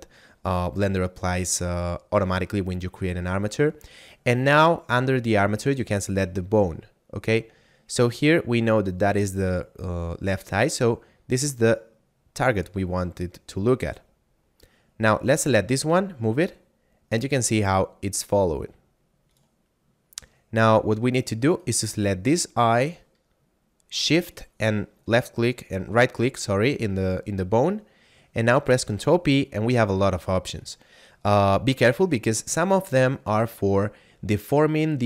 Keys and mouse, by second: 5.7 click, 12.3 click, 15.0 right click, 15.8 g, 19.2 right click, 21.5 right click, 24.3 shift+right click, 28.9 ctrl+p.